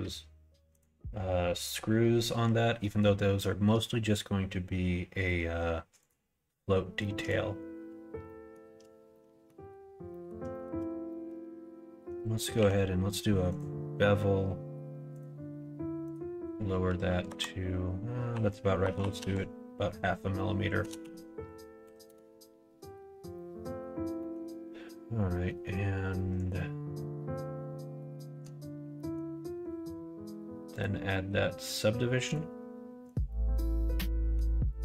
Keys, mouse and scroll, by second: 2.7 middle click, 5.9 click, 6.9 middle click, 8.2 shift+middle click, 9.0 middle click, 10.0 middle click, 10.4 shift+middle click, 11.0 middle click, 12.5 q, 15.9-22.7 drag, 18.9 Right, 23.2 middle click, 24.1 middle click, 25.4 middle click, 26.2 click, 28.1 middle click, 28.9 middle click, 30.6-32.5 drag, 33.2-34.3 middle drag, 34.7 middle click.